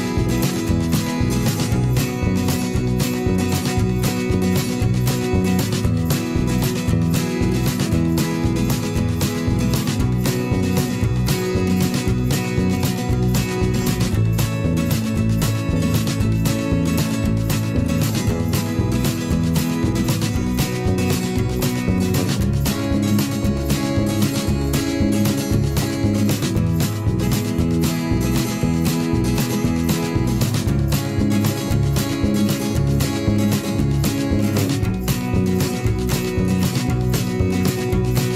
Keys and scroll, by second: 27.5 ctrl+c.